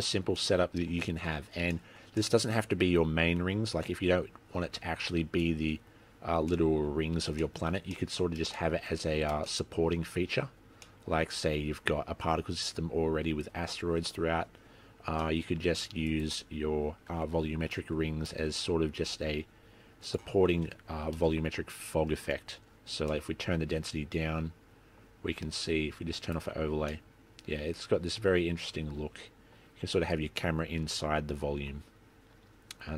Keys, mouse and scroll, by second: 0.6 middle click, 1.1-1.5 scroll up 2, 1.9 shift+middle click, 2.3 middle click, 2.8-3.5 scroll down 6, 4.0-4.4 scroll up 5, 4.7-5.4 scroll down 7, 5.7-6.3 scroll up 6, 6.7 middle click, 7.6 shift+middle click, 8.1 middle click, 8.7 shift+middle click, 9.1 scroll up 1, 9.7 shift+middle click, 11.0 middle click, 15.3 middle click, 15.3-16.0 scroll up 1, 16.2 click, 20.3 click, 22.5 scroll up 2, 23.4 middle click, 26.4 click, 27.1 middle click.